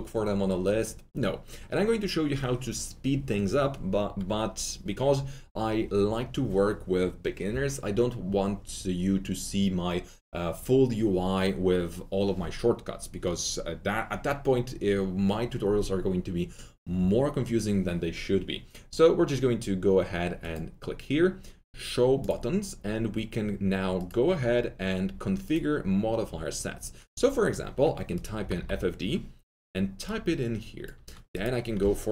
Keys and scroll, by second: 28.3 typing.